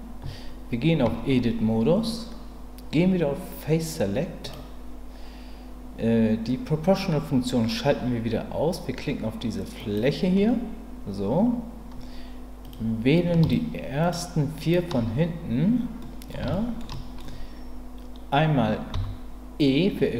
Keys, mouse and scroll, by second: 1.1 Tab, 4.4 click, 9.8 click, 14.1 shift+click, 14.6 shift+click, 16.0 middle click, 16.5 shift+middle click, 16.9 shift+middle click, 18.9 e.